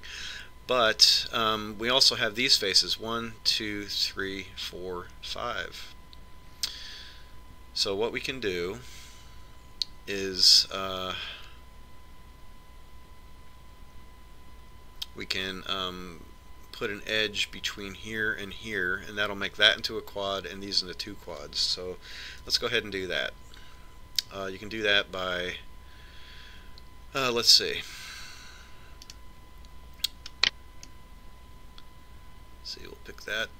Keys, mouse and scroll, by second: 23.7 a, 30.4-32.2 right drag, 32.2-33.5 middle drag.